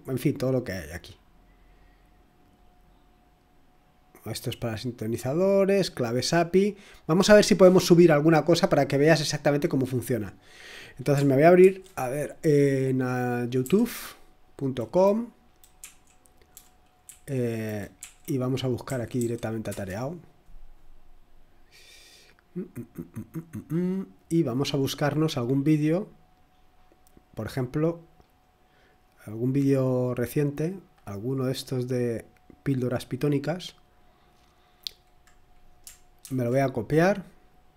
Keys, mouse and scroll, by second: 0.9 click, 2.5 click, 6.3-6.8 scroll up 2, 8.0 click, 11.6 ctrl+t, 13.6 y, 15.8 Right, 16.5 Down, 17.0 Up, 18.0 Right, 18.8-19.1 typing, 19.7 Return, 22.1-22.9 typing, 24.6-26.6 scroll down 1, 26.6-28.2 scroll up 2, 28.2-31.0 scroll down 2, 31.0-31.9 scroll down 1, 33.1 click, 35.6 click, 36.2 ctrl+c, 37.4 click.